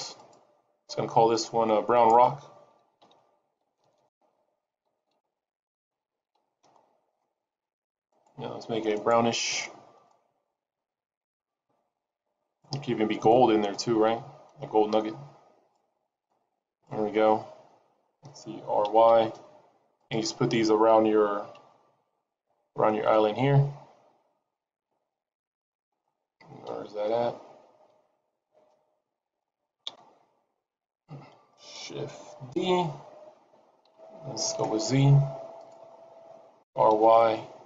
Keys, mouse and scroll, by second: 0.4 click, 3.8 BackSpace, 3.9 BackSpace, 8.1 click, 18.8 r, 21.6 shift+d, 26.6 KP_7, 27.8 g, 29.8 KP_0, 32.6 shift+d, 36.6 r.